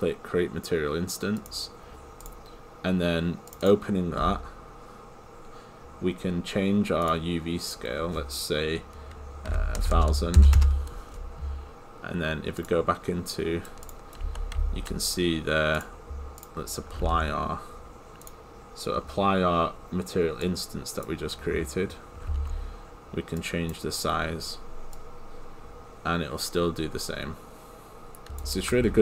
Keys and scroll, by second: 10.6 Return.